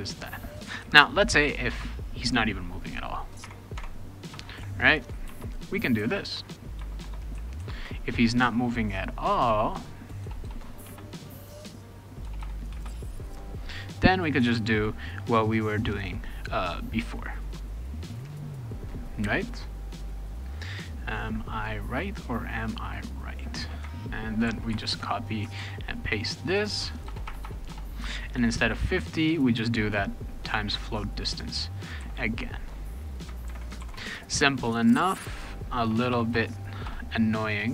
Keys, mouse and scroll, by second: 1.7 Return, 3.4 Tab, 3.8 Tab, 4.3 BackSpace, 5.3 shift+], 6.3 Return, 6.8 Return, 7.0 Return, 9.7 click, 10.2 BackSpace, 10.4 BackSpace, 10.8 space, 11.8 click, 12.2 BackSpace, 12.4 BackSpace, 12.7 space, 13.8 click, 17.8-18.9 drag, 24.4 ctrl+c, 24.7 ctrl+x, 25.3 click, 25.6 ctrl+v, 26.7 click, 27.1 BackSpace, 27.2 BackSpace, 27.4 BackSpace, 27.7 BackSpace, 28.6 click, 30.9-31.9 drag, 32.0 ctrl+c, 32.8 click, 33.5 ctrl+v, 33.8 ctrl+s, 35.3 click, 35.8-37.7 typing, 37.6 click.